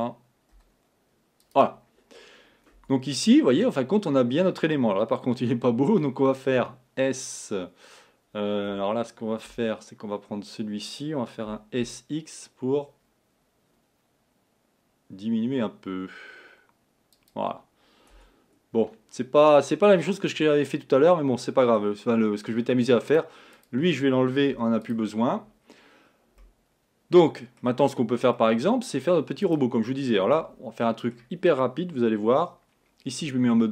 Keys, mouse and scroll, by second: 0.0 g, 2.8 Tab, 6.7 s, 9.6 Tab, 11.5 s, 18.2 Tab, 19.8-22.8 middle drag, 23.1 click, 23.6 click, 24.6 x, 25.7-26.5 scroll up 3, 26.5 middle click, 29.6 middle click, 30.5 Tab, 30.9-33.3 middle drag, 33.3 2.